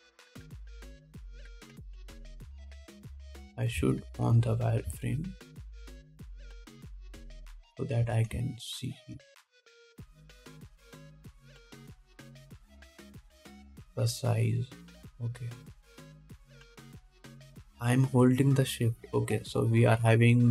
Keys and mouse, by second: 2.9-3.8 shift+drag, 3.8-10.2 middle drag, 8.8 g, 10.2-10.8 shift+drag, 10.8 shift+middle click, 10.9-20.5 shift+drag, 11.5 g.